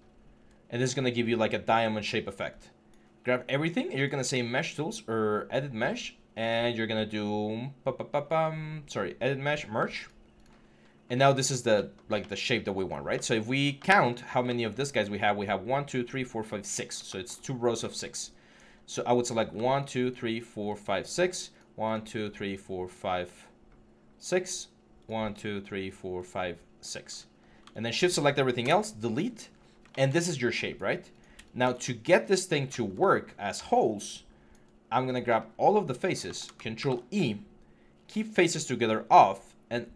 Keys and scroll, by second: 14.0 4, 28.4 BackSpace, 36.6 ctrl+e.